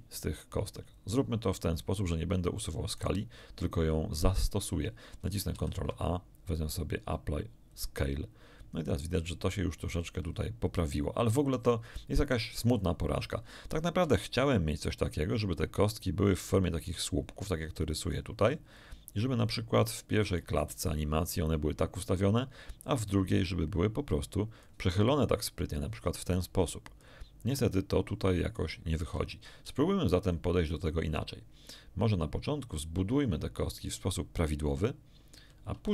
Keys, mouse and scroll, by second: 2.9 shift+right click, 5.5 ctrl+a, 7.6 click, 14.0 d, 14.2 d, 14.4-16.1 drag, 14.4 d, 16.5-18.2 drag, 18.7-20.5 drag, 22.8 click, 23.4-24.8 drag, 25.4-27.2 drag, 27.6-29.2 drag, 29.7-35.5 right drag, 35.8 x.